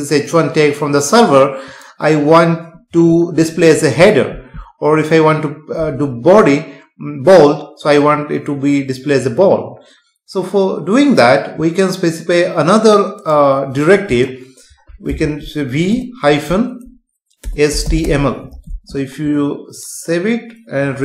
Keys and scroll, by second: 14.0 space, 18.7 ctrl+s.